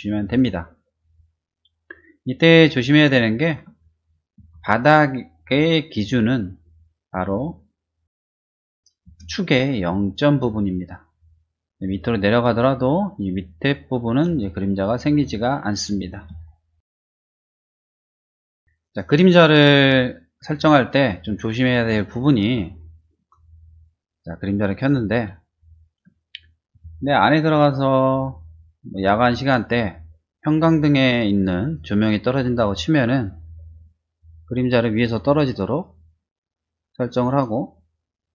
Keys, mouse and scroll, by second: 0.2 click, 2.0 middle click, 3.2 shift+middle click, 4.0 shift+click, 4.3 s, 7.1 middle click, 8.0 click, 8.4 click, 8.5 space, 8.6 middle click, 9.0 space, 10.3 middle click, 11.5 middle click, 13.5 middle click, 14.0 space, 14.3 click, 14.8-16.0 middle drag, 16.4 shift+middle click, 16.9 shift+middle click, 17.5 click, 18.9 click, 20.1 middle click, 21.1 middle click, 22.0 shift+middle click, 22.7 shift+middle click, 23.9 click, 24.7 click, 25.4 shift+middle click, 27.2 click, 27.9 click, 29.3-31.7 drag, 34.2-37.4 drag, 37.9-38.3 drag.